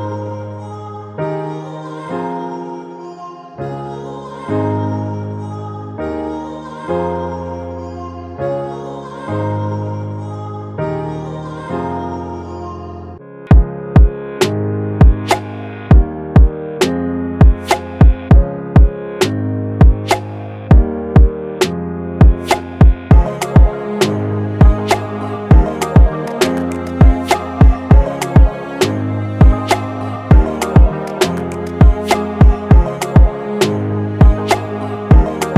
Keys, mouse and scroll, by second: 1.2 alt+shift+click, 6.5 alt+shift+click, 9.6-11.0 Right, 11.6 Right, 11.8 Left, 12.1 click, 31.2-31.6 typing, 32.7 typing.